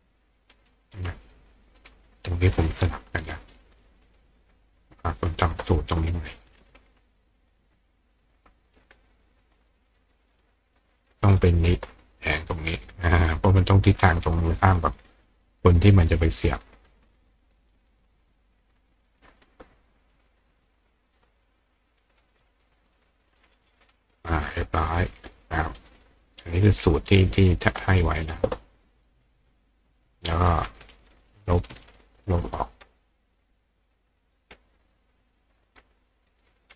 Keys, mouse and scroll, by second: 0.5 right click, 1.5 click, 3.4 right click, 4.8 click, 6.6 click, 7.5-8.8 drag, 9.9 click, 10.3 click, 11.0 click, 13.0 click, 14.4 click, 16.0 click, 16.8 click, 17.9 click, 19.1 click, 20.3 click, 21.2 click, 22.1 click, 23.0 click, 23.8 click, 24.9 click, 25.3 click, 25.7 right click, 27.8 click, 29.3 click, 32.3 click, 34.0 click, 35.2 click, 36.3 click.